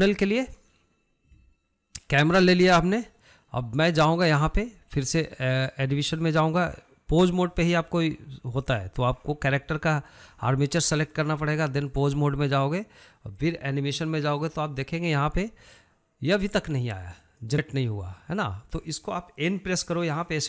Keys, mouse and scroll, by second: 7.6-10.5 drag, 11.5-13.9 drag, 17.6 click.